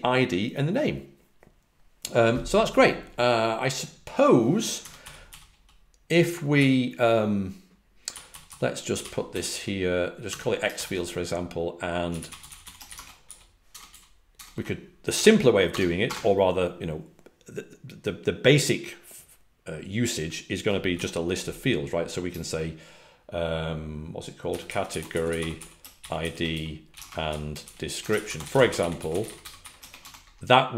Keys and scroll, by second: 4.7-5.4 typing, 6.5 typing, 7.8-10.2 typing, 12.1-16.0 typing, 20.9 ', 24.7-26.6 typing, 28.2-30.0 typing.